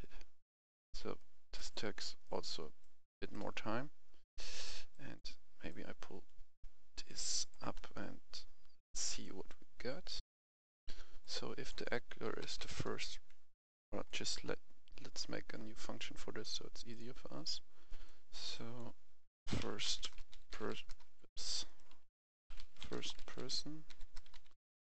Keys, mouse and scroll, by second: 1.2 right click, 1.6-2.2 scroll down 1, 2.2 right click, 4.9 click, 7.7 right click, 8.1-8.9 scroll up 1, 8.9 right click, 10.2 F11, 11.2 click, 12.2-12.6 typing, 13.6 Escape, 14.0 click, 14.4 scroll up 1, 15.2 scroll down 1, 16.2-16.8 scroll up 1, 16.8 click, 17.8 right click, 18.5-19.7 drag, 19.2-20.9 typing, 21.0 Escape, 21.6-22.7 right drag, 22.3-24.9 typing.